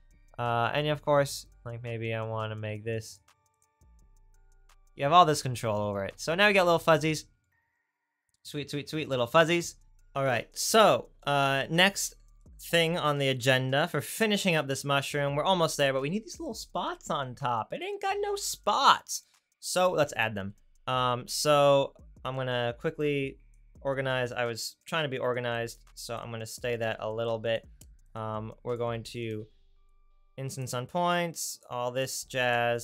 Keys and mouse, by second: 3.1-7.1 drag, 3.1-7.1 right drag, 15.8-21.0 middle drag, 21.0 right click, 21.7-23.0 right drag, 23.0-27.4 drag, 30.1 click, 31.1 click, 32.0 click.